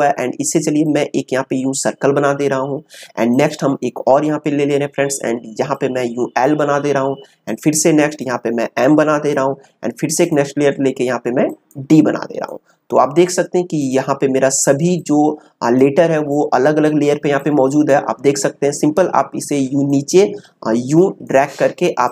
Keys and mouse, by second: 1.1-3.3 drag, 5.7-19.8 drag, 19.8-22.1 drag.